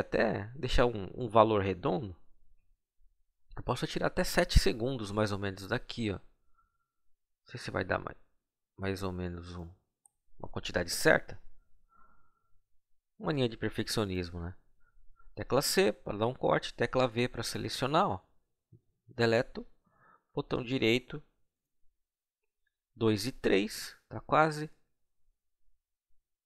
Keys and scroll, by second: 11.4 c, 16.6 v, 18.7 Delete.